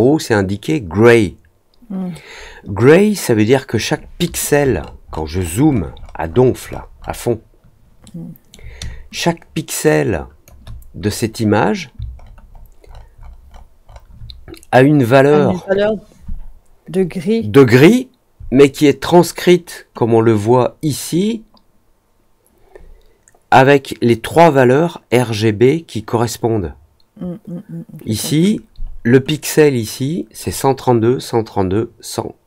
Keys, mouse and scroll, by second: 4.8 alt+middle click, 5.1 alt+middle click, 5.3 alt+middle click, 5.6 alt+middle click, 6.6 alt+middle click, 6.9-8.4 alt+middle drag, 9.0-10.4 drag, 12.1 alt+middle click, 12.4 alt+middle click, 12.8 alt+middle click, 13.1 alt+middle click, 13.4-14.0 alt+scroll up 2.